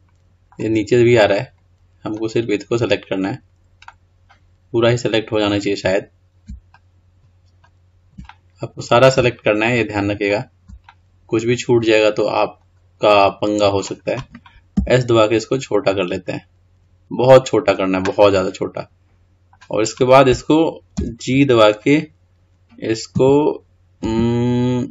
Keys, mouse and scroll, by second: 1.3 click, 2.2 click, 4.0-6.9 middle drag, 8.5-9.8 middle drag, 9.8 shift+click, 11.0-14.1 middle drag, 17.8 s, 18.4-21.2 middle drag, 21.2 g.